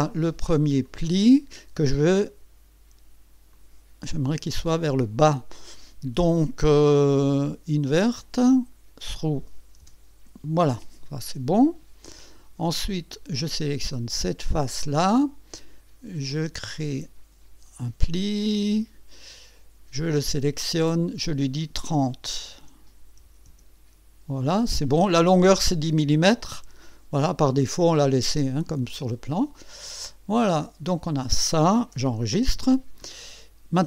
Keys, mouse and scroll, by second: 0.8 click, 3.5 click, 4.8 click, 7.8 click, 8.2 click, 9.0 click, 9.8 Return, 10.5 Return, 12.2 click, 13.6 click, 16.3 click, 18.5 click, 20.1 click, 21.1 click, 22.6 KP_3, 23.2 KP_0, 23.5 KP_Enter, 27.6 click, 28.1 click, 28.2-31.9 drag, 32.2 ctrl+s, 32.9-33.2 scroll up 2, 33.7-33.8 scroll down 1.